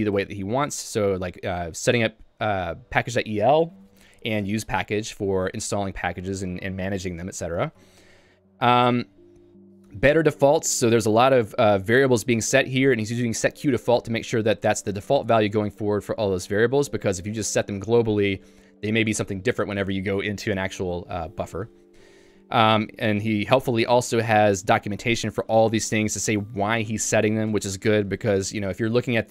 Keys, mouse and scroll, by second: 9.5 k, 11.1-13.5 typing, 14.6 j, 17.3 k, 22.6 j, 22.9-24.0 l, 25.5 j, 28.2-29.3 typing.